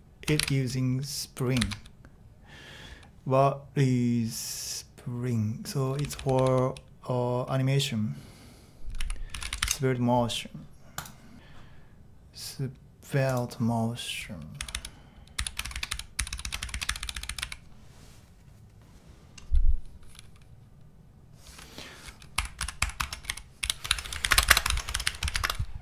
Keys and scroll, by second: 0.0-0.3 typing, 1.6 shift+k, 5.6-7.0 typing, 8.7-10.1 typing, 14.6-17.9 typing, 22.5-25.8 typing.